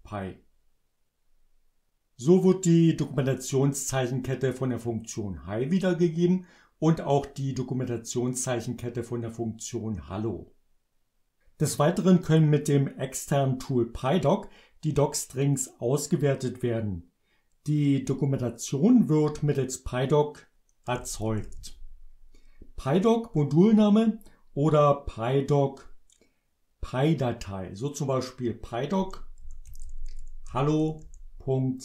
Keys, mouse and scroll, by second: 20.6-22.1 typing, 29.0-31.5 typing.